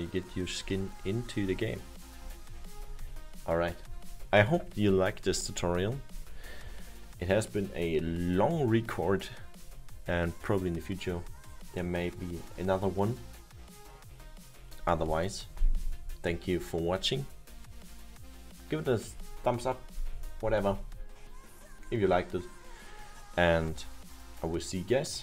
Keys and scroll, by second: 1.2 Left, 3.5 Left.